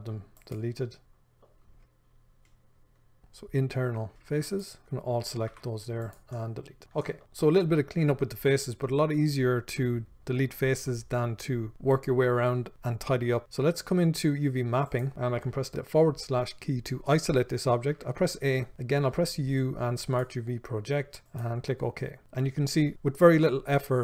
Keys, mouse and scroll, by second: 0.0 click, 1.0 middle click, 4.8 click, 5.0 middle click, 6.5 middle click, 6.9 scroll down 1, 7.2 shift+middle click.